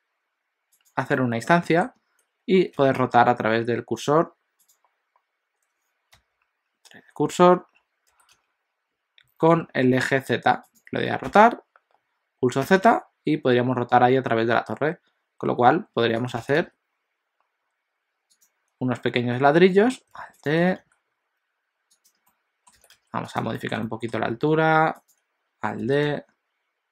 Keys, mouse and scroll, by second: 1.2 middle click, 2.8 r, 20.2 alt+d, 20.6 r, 22.3 middle click, 22.8 g, 23.6 shift+middle click, 23.8 middle click, 24.4 alt+d, 25.8 r.